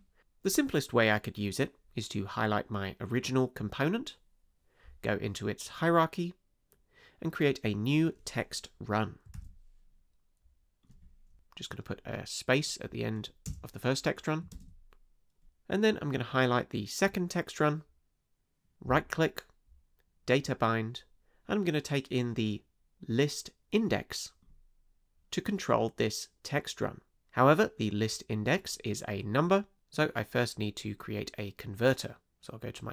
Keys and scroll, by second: 9.3 super+d, 13.4 space, 14.5 super+Return.